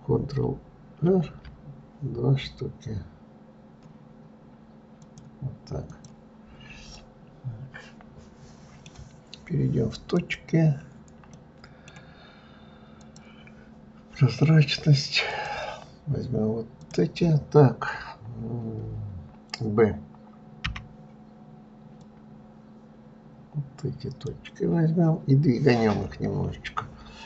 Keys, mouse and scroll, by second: 1.3 ctrl+r, 6.3 right click, 7.1 scroll up 1, 7.2-10.2 middle drag, 10.4 click, 11.6-13.2 middle drag, 13.2 click, 15.5 drag, 17.1 click.